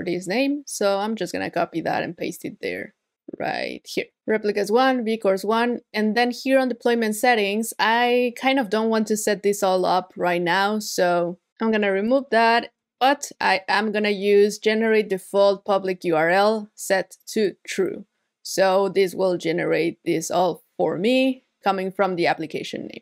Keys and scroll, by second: 3.9 super+v, 13.4 super+v.